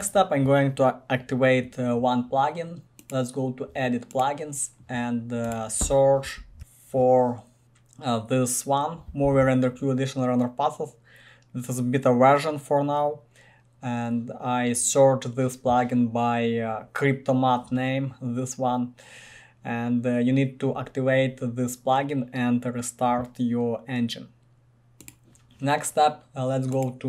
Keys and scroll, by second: 6.3-7.6 typing.